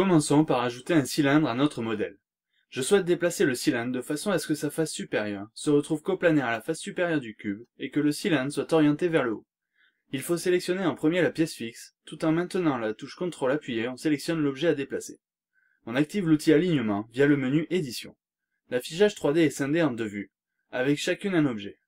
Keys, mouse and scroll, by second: 1.4 click, 2.2 scroll down 1, 2.5 middle click, 2.6-3.2 scroll up 2, 9.5 click, 12.3 ctrl+click, 14.3 click, 16.7 click.